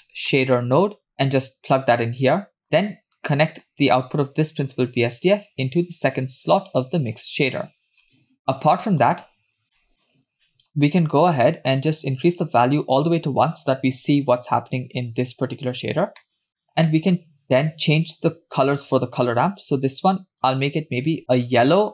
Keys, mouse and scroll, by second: 2.6-3.1 middle drag, 2.6-3.9 scroll up 6, 3.9 click, 5.3-7.4 drag, 8.0 scroll down 2, 8.2 middle click, 9.8 middle click, 10.0 middle click, 10.2 click, 10.3-11.6 scroll up 5, 10.5 middle click, 11.6 scroll up 1, 11.8-12.9 drag, 15.9-16.3 scroll down 3, 16.4 middle click, 16.5-16.9 scroll up 3, 16.6 middle click, 16.9 middle click, 17.2-18.6 scroll up 2, 18.7 click, 19.5 click, 20.4 click.